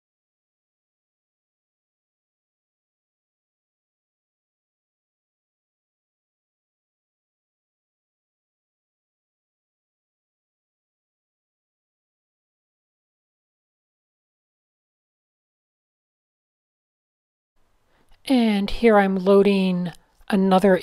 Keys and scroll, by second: 1.0 m, 1.2 super+-, 1.9 shift+super+a, 2.2 super+0, 2.4 Tab, 3.3 Tab, 3.7 alt+shift+super+r, 4.9 a, 5.9 super+h, 6.4 super+h, 7.2 shift+super+a, 8.4 shift+super+a, 8.6 super+space, 8.7 super+space, 8.9 a, 9.6 fn+F7, 9.8 shift+super+a, 10.4 super+0, 11.1 super+space, 12.5 super+h, 13.8 shift+#, 14.1 shift+super+a, 14.4 super+0, 14.6 Tab, 16.1 Tab.